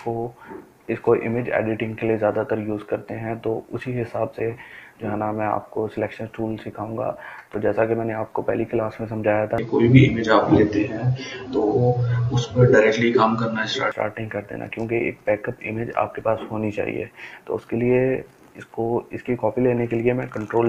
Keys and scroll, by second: 20.5 ctrl+j.